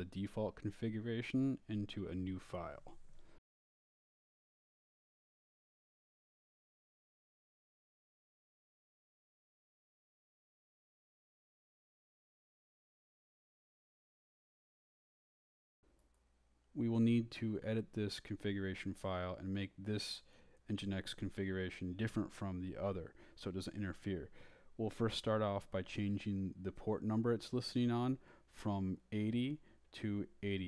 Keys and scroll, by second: 0.0-3.4 typing, 4.8-9.6 typing, 11.2-16.9 typing, 17.7 Return, 18.3-23.0 typing, 25.4 Up, 26.1 Right, 28.6 Right, 30.4 x.